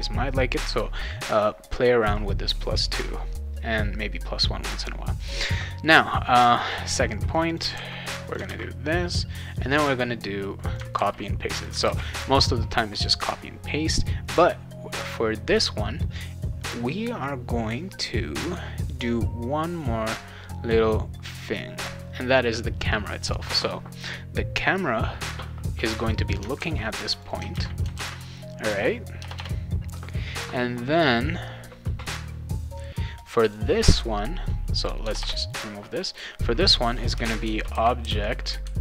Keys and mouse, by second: 7.3 click, 7.5 click, 7.7 ctrl+c, 8.3 click, 8.4 ctrl+v, 10.0 click, 10.9 ctrl+c, 11.5 click, 11.8 ctrl+v, 26.1 click, 26.3 click, 26.6 ctrl+c, 27.1 click, 27.3 click, 27.5 ctrl+v, 27.9 ctrl+s, 28.8 click, 29.2 BackSpace, 29.3 BackSpace, 33.1 click, 33.4 click, 34.8 click, 35.0 BackSpace, 35.2 BackSpace, 35.9 click, 36.1 click, 37.2-38.5 typing.